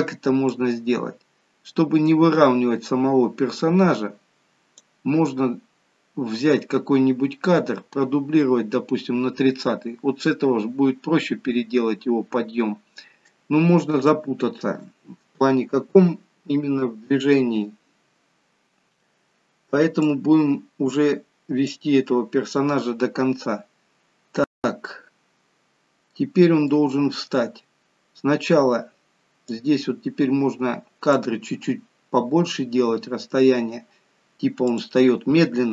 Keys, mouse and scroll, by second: 0.6 click, 5.5-6.0 scroll down 2, 10.2-10.9 scroll up 2, 10.9-12.5 scroll down 1, 12.5-13.3 scroll down 1, 14.2 shift+middle click, 20.1 click, 24.4 scroll up 1, 24.7 middle click, 26.6 middle click, 29.5 click, 34.6 click.